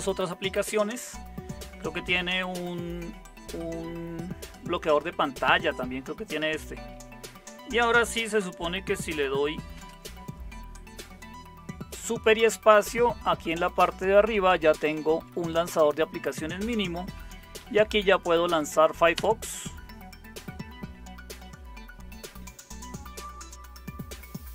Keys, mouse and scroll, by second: 9.7 super+space, 13.7 Right, 14.2 Right, 14.4 Right, 14.8 Left, 15.0 Left, 15.1 Left, 15.3 Left, 16.8-18.2 typing, 19.1 Return.